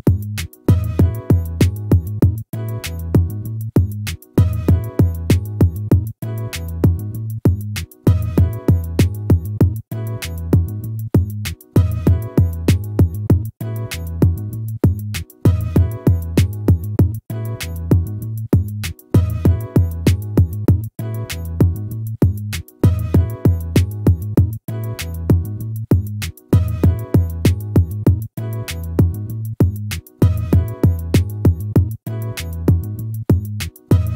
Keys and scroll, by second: 1.6 ctrl++, 9.3 ctrl+-, 15.0 ctrl+z, 19.3 ctrl+-, 30.0 ctrl+z.